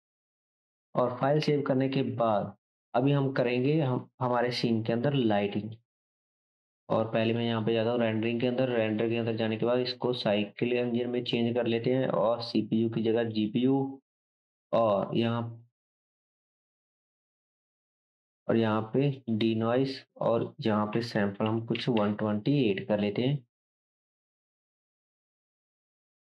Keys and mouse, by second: 0.0-6.1 drag, 2.0 ctrl+s, 6.3-7.3 drag, 7.6-8.8 right drag.